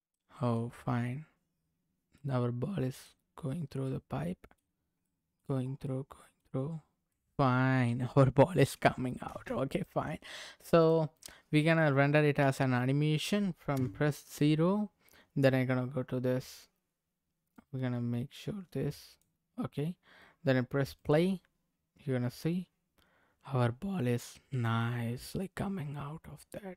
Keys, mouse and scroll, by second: 0.1 middle click, 0.9-1.6 scroll up 1, 2.1 middle click, 3.9 middle click, 5.0 middle click, 5.9 middle click, 7.1 middle click, 8.6 middle click, 9.2 space, 9.8 middle click, 10.8 click, 11.9-12.2 scroll down 2, 13.7 KP_0, 17.6-19.2 drag, 20.9 click.